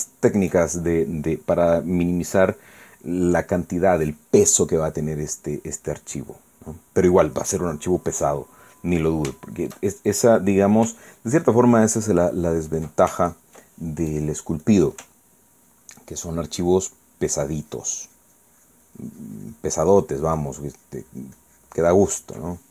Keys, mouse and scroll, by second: 0.4 shift+middle click, 1.0 shift+middle click, 1.6 shift+middle click, 5.8-9.8 middle drag, 10.3-11.6 shift+middle drag, 12.6 ctrl+click, 13.3 ctrl+click, 14.2 ctrl+click, 15.1 click, 15.6 click, 16.5-22.7 ctrl+drag.